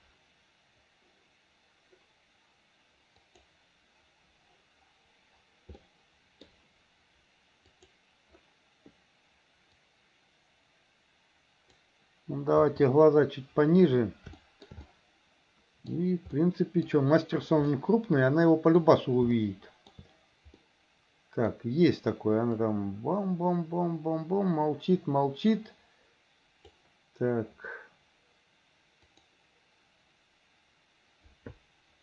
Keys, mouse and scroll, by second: 6.0 middle click, 7.8 click, 10.0 click, 14.4 shift+middle click, 14.9-16.0 middle drag, 16.4 middle click, 17.7-18.8 middle drag, 19.4 shift+middle click, 20.7 middle click, 22.7-26.8 drag, 29.1 click.